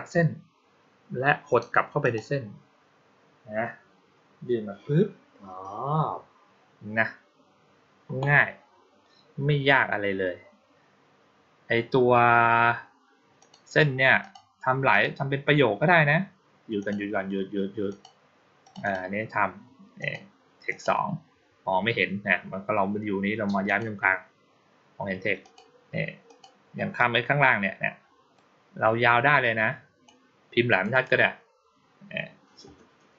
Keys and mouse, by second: 1.9 click, 13.3 click, 14.1 click, 14.8 click, 16.7 click, 17.7 click, 18.5 click, 18.7 click, 19.9 click, 20.5 click, 23.5 click, 25.3 click, 26.1 click, 28.2-29.9 drag, 30.6 click, 30.8 click.